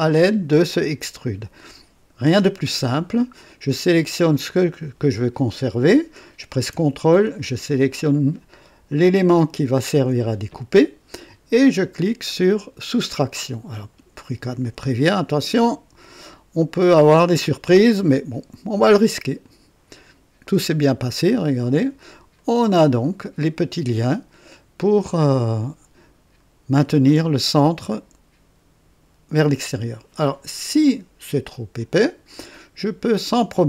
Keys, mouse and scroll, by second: 4.4 click, 9.1 ctrl+click, 13.1 click, 19.4 click, 21.0 right click, 22.3 right click, 31.7 click.